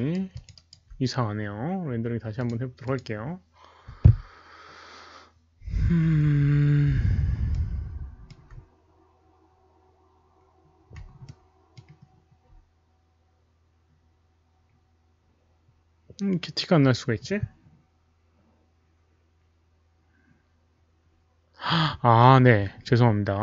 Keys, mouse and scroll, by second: 0.3 alt+click, 0.6 alt+right drag, 2.3 alt+click, 2.8 alt+click, 6.3 alt+middle click, 6.6 alt+click, 6.6 alt+right click, 7.5 alt+middle click, 7.5 alt+click, 7.5 alt+right click, 8.4 alt+middle click, 8.4 alt+click, 8.4 alt+right click, 8.9 alt+middle click, 8.9 alt+click, 8.9 alt+right click, 9.4-10.6 scroll up 1, 11.3-11.7 alt+middle drag, 11.3 click, 11.3 alt+right click, 11.7 click, 13.6 middle click.